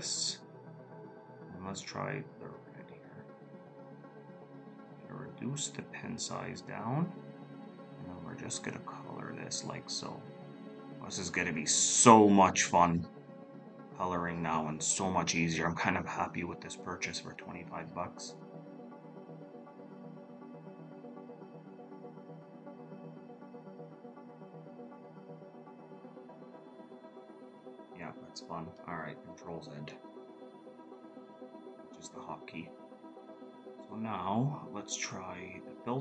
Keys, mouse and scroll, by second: 29.8 ctrl+z.